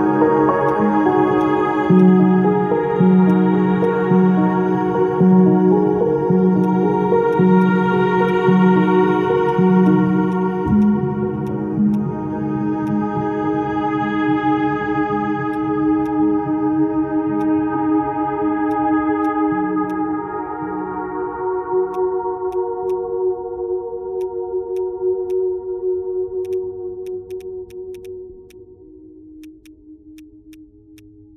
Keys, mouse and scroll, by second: 1.4 ctrl+click, 1.7 ctrl+click, 2.0 ctrl+alt+click, 3.8 ctrl+click, 12.8 ctrl+click, 16.0 ctrl+click, 19.9 ctrl+click, 22.3 ctrl+z, 24.2 ctrl+z, 26.5 double click, 29.6 double click.